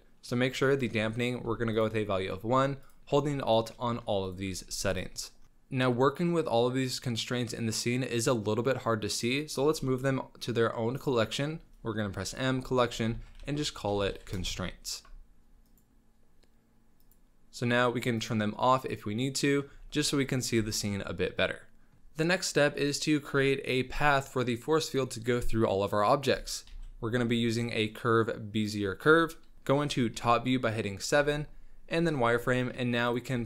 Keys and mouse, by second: 0.7-1.7 alt+drag, 2.9-3.5 alt+drag, 4.3 alt+click, 6.2-6.6 drag, 6.6 middle click, 6.6 drag, 6.8 middle drag, 6.9 drag, 7.0-9.1 middle drag, 9.7 m, 18.8-19.5 middle drag, 19.7 z, 20.0-20.4 middle drag, 20.6 z, 20.9-21.6 drag, 21.6-22.0 middle drag, 26.7 shift+a, 29.5 z, 29.5 KP_1, 30.1 KP_7, 31.1 z, 32.5 Tab, 33.0 click, 33.3 g.